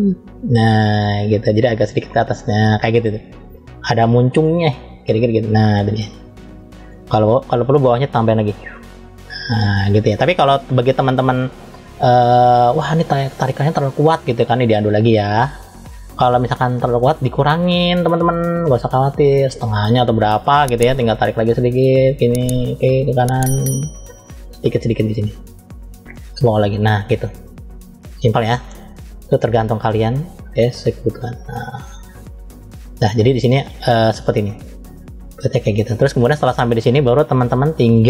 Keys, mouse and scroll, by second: 1.5 click, 4.5-6.7 middle drag, 8.2 click, 11.4 click, 12.6 click, 14.3 click, 18.5-20.1 drag, 21.3 click, 24.5 click, 25.8 click, 27.2-28.7 middle drag, 29.3 click, 30.5 click, 32.9-33.4 scroll up 2, 33.6-36.4 middle drag, 36.5 scroll down 2, 37.2 middle click.